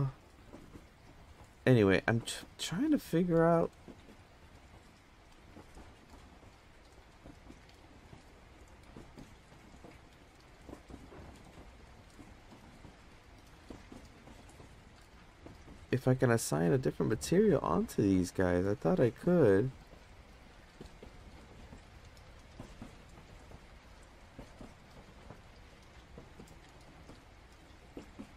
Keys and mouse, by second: 0.3 click, 0.7 click, 2.8-5.4 drag, 7.1 click, 9.2-10.4 drag, 16.2 Tab, 17.5-18.3 drag, 19.8 click, 21.5 click, 21.7 click, 22.9 Tab, 23.4 Tab, 23.6 a, 24.2 a, 24.6 a, 24.9 a, 26.4 click, 27.2 click, 28.0 Tab.